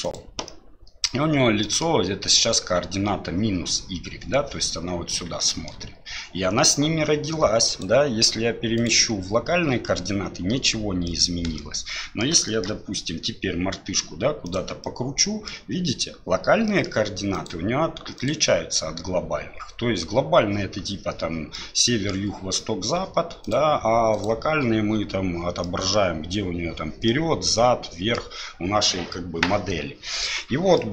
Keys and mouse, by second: 0.5-1.1 middle drag, 1.6 middle drag, 5.4-5.7 shift+middle drag, 7.8-9.7 drag, 11.1-12.2 middle drag, 12.5 shift+middle click, 13.1 r, 14.8-15.5 middle drag, 16.7 middle click, 17.3-20.5 drag, 21.5-22.1 middle drag, 23.4-24.5 drag, 25.6-26.0 middle drag, 27.1-28.1 middle drag, 30.7-30.9 middle drag.